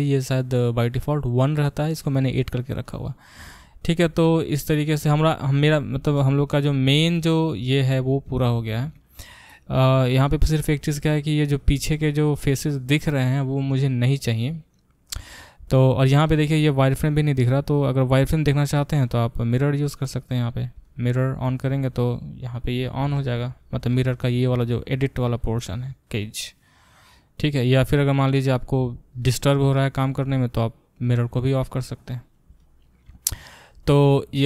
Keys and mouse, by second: 5.0-25.4 middle drag, 19.5 click, 25.4 click, 25.5 middle click, 26.0 click, 27.0-31.0 middle drag, 31.0 click, 32.1-34.4 middle drag, 34.4 click.